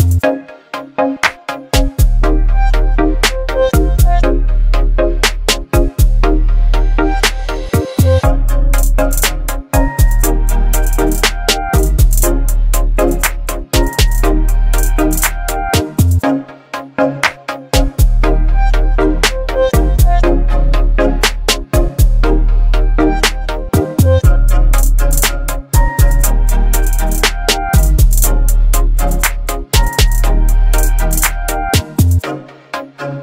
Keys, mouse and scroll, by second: 0.4 right click, 1.4 click, 8.2-8.8 drag, 16.2 ctrl+c, 18.2 click, 20.5 ctrl+v, 21.2 Return, 23.5 click, 26.0-29.1 scroll up 1.